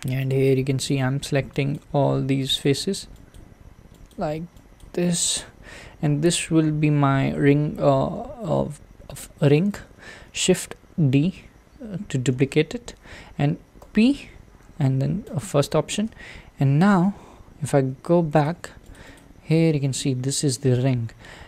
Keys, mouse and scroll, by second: 0.9 shift+click, 1.7 shift+click, 2.6 shift+click, 3.3 shift+click, 4.1 shift+click, 4.8 shift+click, 5.8 scroll down 2, 6.5-9.7 scroll up 2, 9.7 shift+d, 15.4 p, 16.8 Tab, 17.7 alt+z, 18.4 click, 18.9 click, 19.1 click, 19.9-21.2 middle drag, 21.2-21.4 scroll down 2.